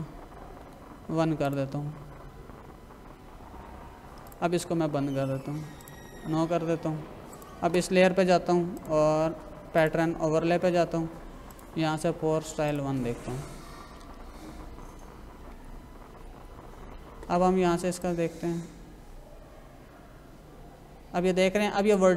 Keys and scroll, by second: 0.6 1, 15.5 ctrl+-.